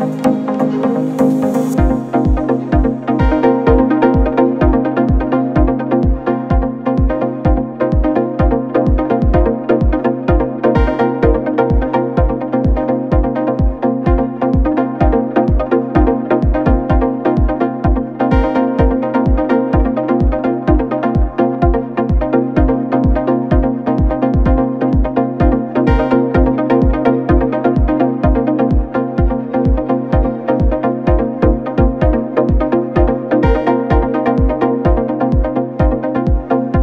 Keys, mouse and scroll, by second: 0.2 click, 4.7 click, 5.3 click, 6.6 click, 7.8 click, 10.0-14.6 drag, 14.6-15.9 middle drag, 15.9-17.3 scroll down 3, 20.4-21.2 drag, 22.5 click, 25.4 KP_0, 26.4 KP_0, 29.8-36.0 drag, 36.0-36.8 middle drag.